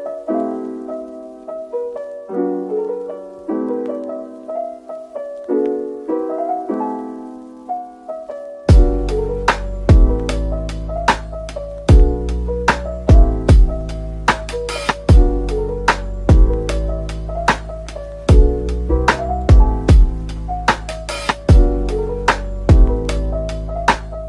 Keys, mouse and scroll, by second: 4.8 double click, 7.0 scroll up 1, 10.3 scroll down 1, 13.0 scroll down 1, 16.6 shift+click, 18.8 double click, 21.6 double click.